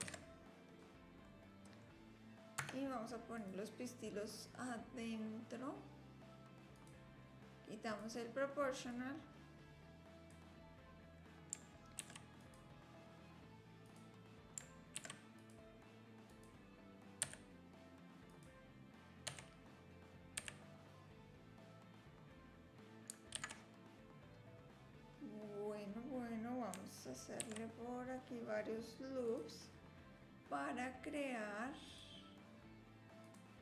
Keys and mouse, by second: 0.1 ctrl+j, 1.2-1.8 drag, 2.6 Tab, 3.3 click, 6.4 click, 7.5 ctrl+z, 7.9 click, 9.0-10.4 drag, 12.0 ctrl+r, 15.0 ctrl+r, 17.2 a, 18.3 click, 19.3 l, 20.4 s, 27.4 ctrl+r, 31.0 click, 33.2 click.